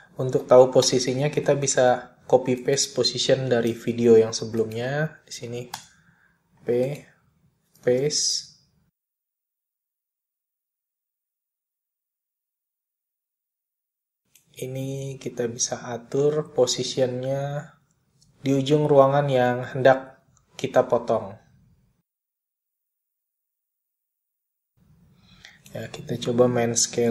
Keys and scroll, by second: 2.9 p, 5.0 super+c, 6.6 p, 8.1 super+v, 18.4 r, 20.3 super+z.